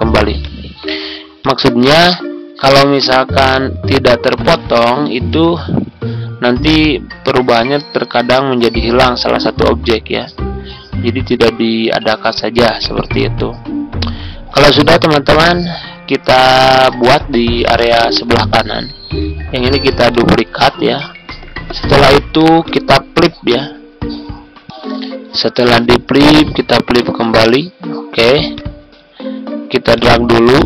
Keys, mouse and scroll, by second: 17.7 ctrl+scroll down 1, 18.5-19.1 ctrl+scroll up 1, 19.5 ctrl+d, 20.0-21.5 drag, 21.3 shift+c, 22.6 click, 24.6 Tab, 27.3-30.6 drag.